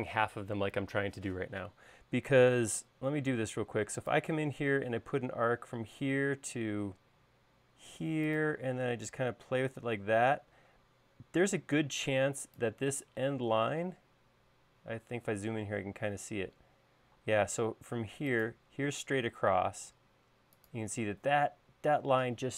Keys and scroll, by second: 2.9 a, 17.6 |.